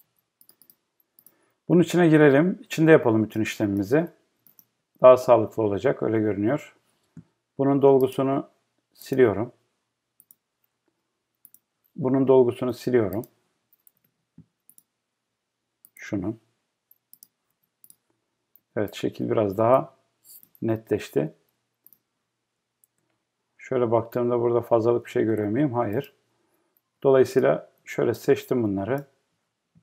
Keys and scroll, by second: 18.6 Escape.